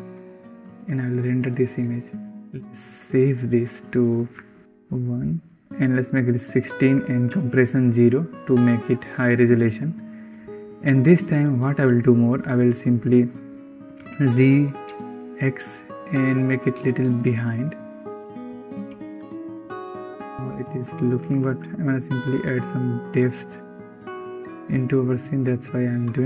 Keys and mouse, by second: 12.8-13.6 drag, 14.2 g, 17.9 drag, 18.1-18.9 typing, 20.2 r, 20.9 r.